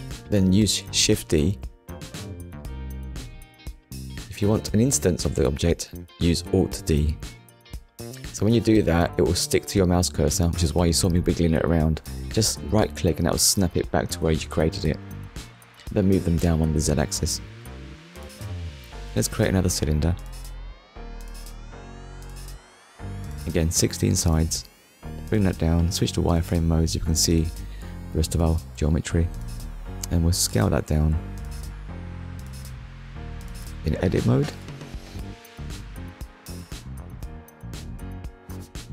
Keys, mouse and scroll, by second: 0.6 Return, 1.7 click, 2.2 click, 3.0 click, 4.5 BackSpace, 4.6 3, 4.9 Return, 5.9 click, 6.8 ctrl+s, 7.6 middle click, 8.8 shift+middle click, 10.9 KP_1, 11.8 scroll up 1, 12.6 scroll up 1, 16.9 shift+a, 18.5 click, 22.0 click, 22.6 click, 23.0 scroll down 1, 24.3 click, 26.2 click, 26.7 shift+middle click, 28.7 click, 31.9-32.2 scroll up 1, 33.5 Tab, 38.2 click.